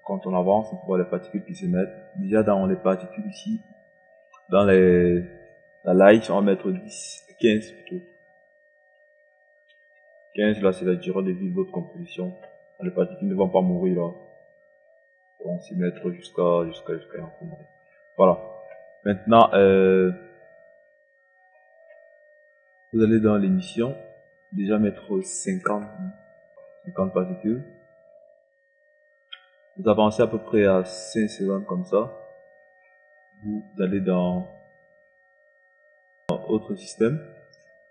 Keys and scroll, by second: 6.3 KP_1, 6.5 0, 9.7 KP_5, 25.3 KP_5, 25.7 KP_0.